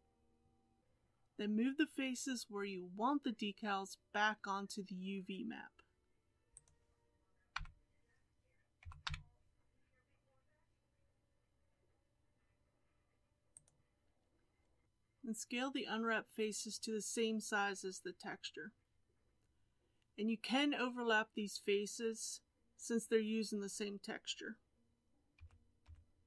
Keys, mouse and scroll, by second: 0.8 alt+a, 6.6 click, 7.6 l, 8.9 g, 14.8 g, 25.4 s.